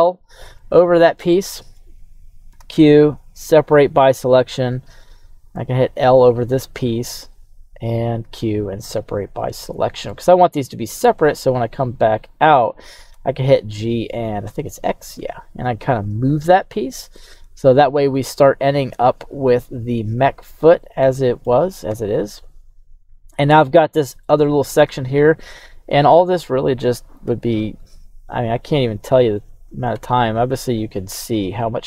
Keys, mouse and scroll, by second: 0.5-1.8 middle drag, 3.6 q, 5.5 l, 8.2 q, 9.4 middle click, 11.2 Tab, 11.8 right click, 13.1 g, 13.9 y, 14.4 x, 16.2 click, 16.9 right drag, 17.2-17.7 middle drag, 17.8 scroll down 2, 18.1-21.4 middle drag, 21.9 KP_3, 22.4-23.3 scroll up 4, 24.2-24.8 shift+middle drag, 26.0 right drag, 27.2 q, 29.9 Tab, 30.6 right click.